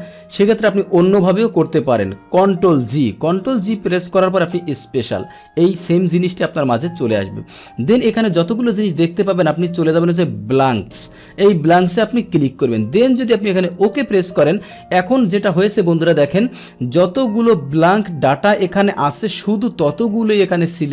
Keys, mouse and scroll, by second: 1.8 click, 2.6 ctrl+g, 4.4 click, 5.8-7.0 drag, 10.6 click, 13.8 click, 16.9-18.3 scroll down 1, 19.0-20.9 scroll down 1.